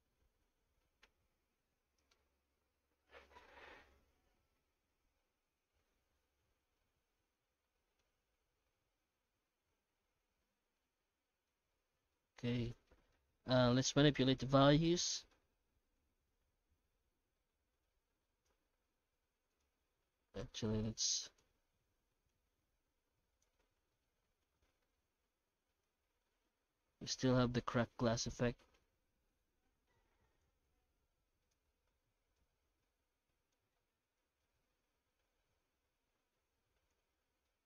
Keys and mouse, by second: 0.0 ctrl+space, 6.7-9.4 middle drag, 10.4-10.8 middle drag, 11.3 middle click, 12.1 middle click, 13.0 middle click, 14.0 middle click, 15.1 middle click, 15.9-18.5 shift+drag, 23.9-25.8 middle drag, 26.7-28.8 middle drag, 30.4-31.5 drag, 32.5-33.5 shift+drag, 34.3-36.9 shift+drag, 37.5-37.6 middle drag.